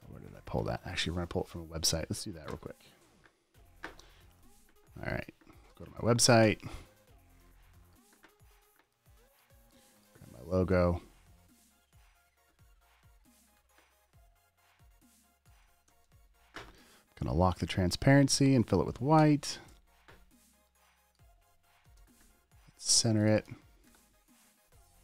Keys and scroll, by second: 2.8 super+n, 5.8-6.8 typing, 6.9 Return, 11.0 super+t, 13.9 super+t, 16.3 v, 19.5 super+BackSpace, 20.0 v, 22.1 super+a, 22.3 super+v, 23.6 super+d, 23.8 v, 24.2 super+t.